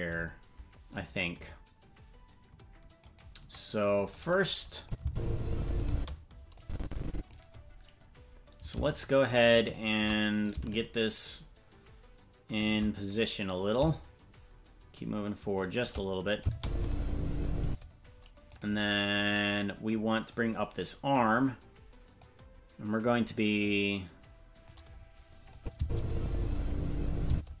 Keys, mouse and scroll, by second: 3.2 right click, 4.8 click, 5.0 space, 5.9 space, 6.6 click, 9.0 shift+right click, 10.5-12.6 drag, 10.5 shift+right click, 13.9-15.9 shift+drag, 16.4 click, 16.5 space, 17.6 space, 18.6 right click, 20.3-21.4 drag, 22.2-24.7 drag, 25.5 click, 25.8 space, 27.3 space.